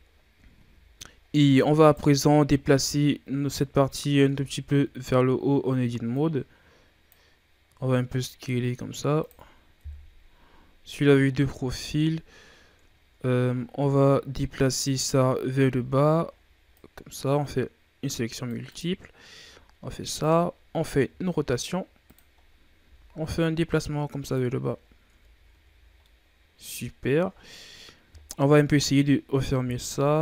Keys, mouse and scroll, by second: 0.4 a, 1.2 scroll up 3, 1.7 right click, 3.0-3.8 scroll down 2, 3.8-4.1 scroll up 1, 4.1 Tab, 5.0 a, 6.0-7.5 drag, 7.5 s, 9.7 KP_3, 11.1-11.7 ctrl+scroll up 7, 11.7-12.0 shift+scroll down 1, 12.0-12.9 scroll up 1, 12.9-13.5 ctrl+scroll down 2, 13.5 shift+scroll down 2, 13.8 z, 14.6 right click, 15.5 c, 19.2 g, 21.0 r, 22.3-22.7 scroll up 1, 22.7 g, 24.4 z, 24.7-25.0 scroll down 1, 25.0 Tab, 25.4 a, 25.6 scroll down 2, 25.9-28.1 middle drag, 28.1-28.7 scroll up 1, 28.7-29.6 middle drag, 29.6 KP_3, 29.9 Tab.